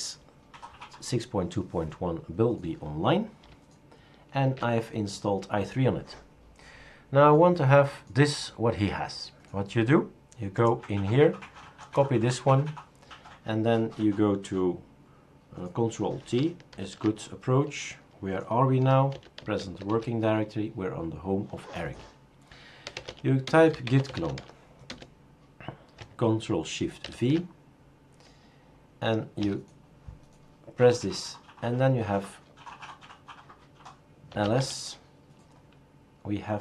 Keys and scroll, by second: 4.4 super+q, 16.7 ctrl+alt+t, 18.9-20.1 typing, 22.6-24.9 typing, 27.0 ctrl+v, 29.4 Return, 34.1-34.9 typing.